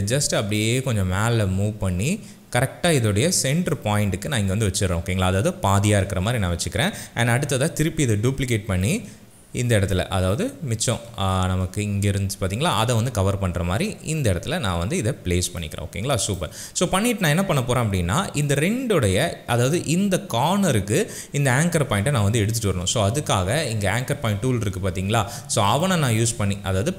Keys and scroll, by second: 8.1 ctrl+d.